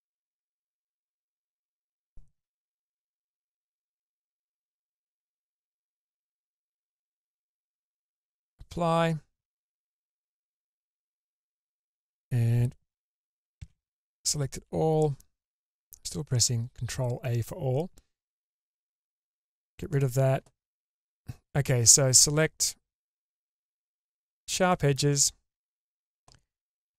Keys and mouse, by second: 2.8 Tab, 3.8 Tab, 5.3-8.4 drag, 9.4 middle click, 10.0 Tab, 10.9 Tab, 13.6 ctrl+a, 14.5 a, 18.5 click, 19.9 click, 24.7 shift+middle click, 25.2 middle click.